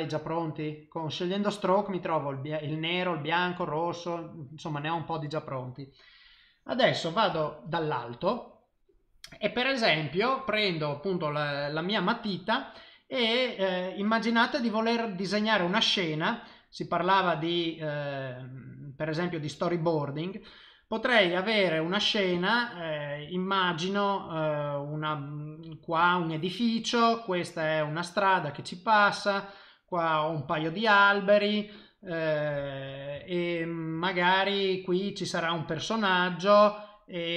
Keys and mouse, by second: 4.2 middle click, 7.3 KP_7, 15.8 click, 17.2 click, 17.8 click, 18.1 click, 18.9 click, 19.5 click, 21.4 click, 22.0 click, 22.3 click, 22.7 click, 24.2 click, 25.0 click, 26.0 click, 27.1 click, 27.6 click, 28.7 click, 29.9 click, 33.3 ctrl+middle click, 34.7 click, 35.8 click.